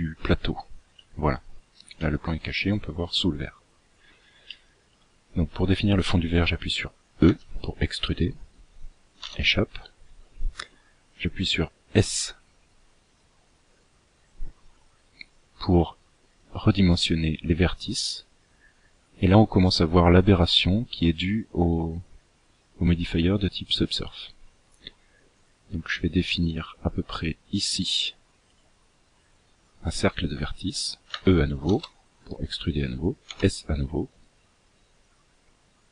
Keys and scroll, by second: 7.0 e, 11.8 s, 30.8 e, 33.0 s.